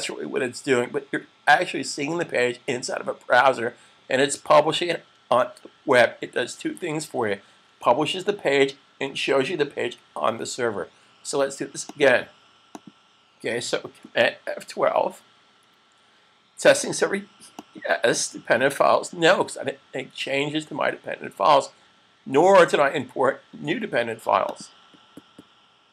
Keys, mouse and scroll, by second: 11.7 click, 15.5 super+fn+F12, 17.6 click, 24.5 click.